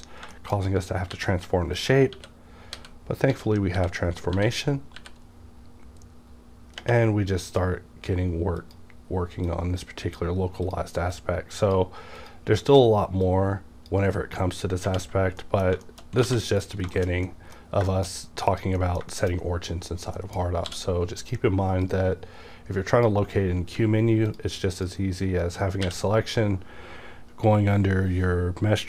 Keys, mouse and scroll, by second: 0.6-1.1 scroll up 1, 1.1-3.8 typing, 1.8 click, 5.0 typing, 7.6-15.2 drag, 15.2 scroll down 1, 15.4 middle click, 15.8 shift+middle click, 16.1 scroll down 1, 16.3 alt+a, 16.5 middle click, 16.6 scroll down 1, 16.9 shift+middle click, 17.9 shift+middle click, 18.1 shift+scroll down 2, 18.5 click, 18.8 middle click, 20.7 d, 21.2 click, 21.9-24.3 drag, 23.8 x, 24.8 click, 25.8 q.